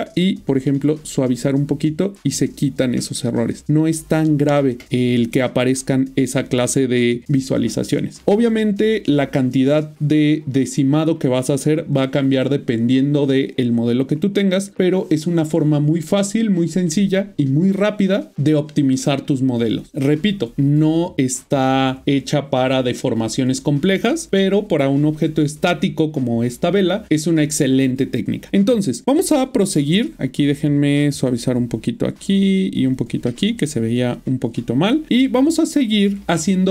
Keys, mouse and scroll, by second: 0.3 shift+click, 1.5 middle click, 7.7 middle click, 8.7 middle click, 10.8 middle click, 29.2 middle click, 30.3 ctrl+middle click, 33.7 ctrl+middle click.